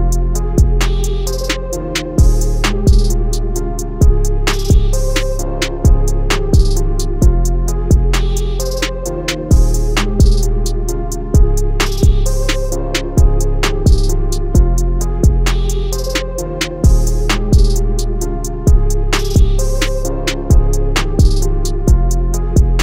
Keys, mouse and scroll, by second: 1.6 click, 9.8 i, 12.3 click, 17.6 click.